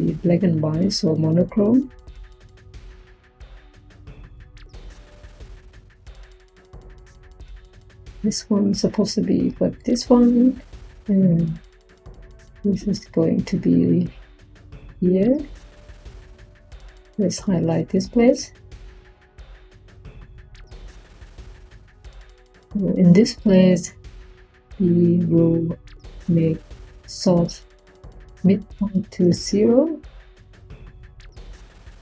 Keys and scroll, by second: 29.1 0, 30.5 0.